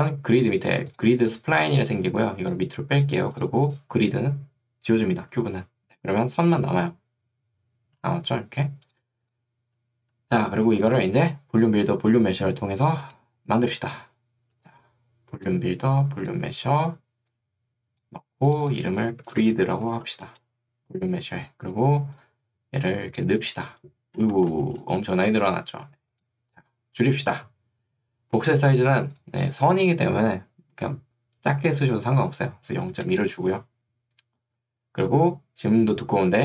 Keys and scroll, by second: 19.3 shift+g, 20.3 Return, 32.9 2, 33.1 Return.